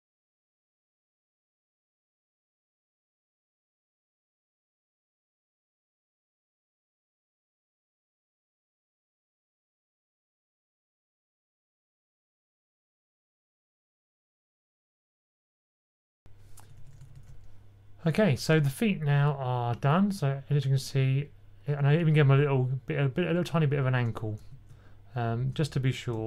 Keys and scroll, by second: 0.0 k, 3.5 super+c, 4.5 k, 6.4 super+z, 6.5 super+z, 7.3 super+z, 8.1 typing, 9.7-10.5 typing, 10.6 super+c, 11.4 super+z, 11.9 super+v, 14.1 super+a, 14.3 Up, 14.6 Up, 16.5-17.1 typing, 24.3 super+z, 25.3 super+z, 26.1 super+z.